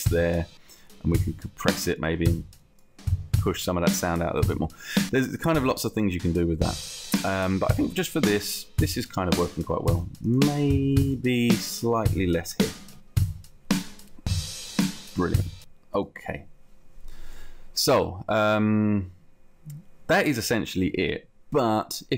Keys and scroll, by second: 12.8 2, 13.1 Return.